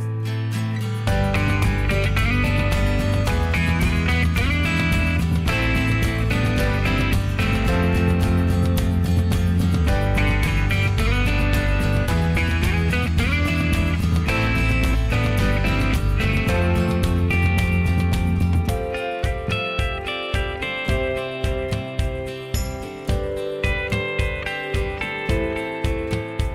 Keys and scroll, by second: 3.4 Escape, 3.6 Escape, 7.8 ctrl+z, 8.0 ctrl+z, 8.4 ctrl+z, 14.6 ctrl+z, 14.8 ctrl+z, 15.1 ctrl+z, 17.1 Delete, 17.7 ctrl+z, 17.8 ctrl+z, 17.9 ctrl+z, 19.5 Escape, 19.6 Escape, 19.8 Escape.